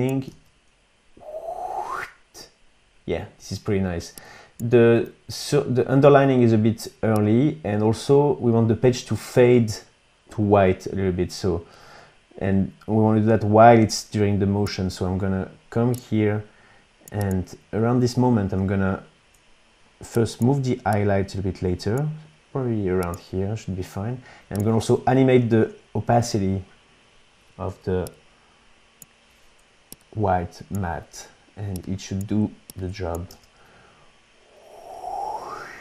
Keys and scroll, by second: 0.2 space, 3.9 space, 25.4 alt+t, 33.2 space.